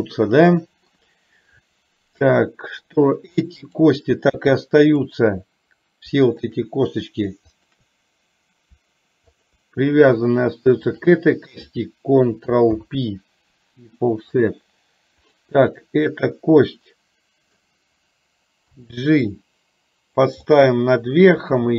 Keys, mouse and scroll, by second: 2.4 middle click, 3.8 click, 5.1 shift+click, 7.5 shift+click, 11.0 shift+click, 12.8 ctrl+p, 14.5 click, 15.3 click, 16.8 middle click, 18.8 g, 20.5-21.7 middle drag.